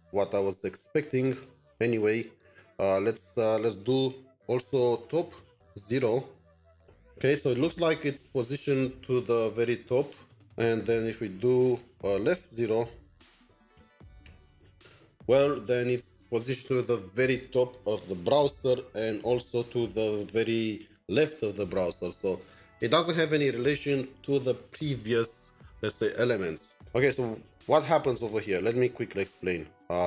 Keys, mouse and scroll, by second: 1.6-2.0 scroll up 1, 4.5-6.0 typing, 11.6-14.2 typing.